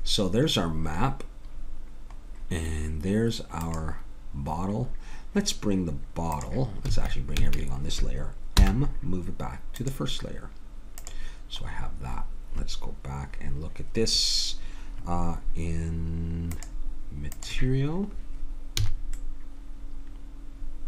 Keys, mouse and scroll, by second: 1.4 middle click, 3.6-4.7 drag, 6.9 a, 7.4 a, 8.5 m, 16.5 click, 18.8 a, 19.3 middle click.